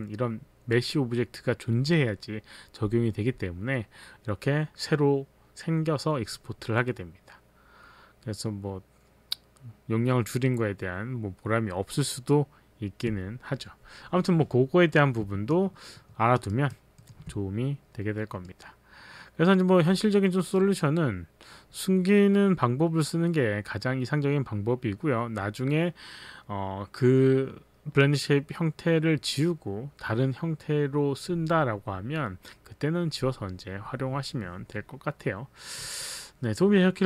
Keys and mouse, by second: 15.5 alt+click, 16.5 alt+right click, 17.0 alt+middle click.